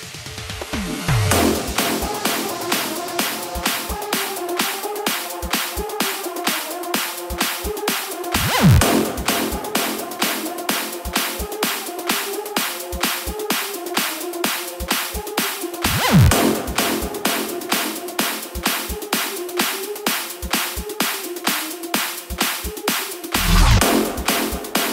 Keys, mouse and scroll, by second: 4.3-16.6 drag, 18.4 click, 20.2 KP_0, 21.0-24.2 scroll up 2, 24.2-24.9 drag.